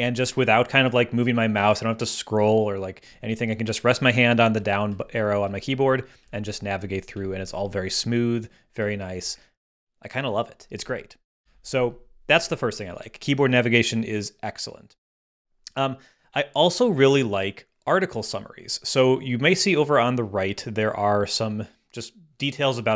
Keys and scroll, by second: 4.5 Down, 6.5 Down, 7.1 Down, 9.3 Up, 9.9 Up, 11.4 ⟲.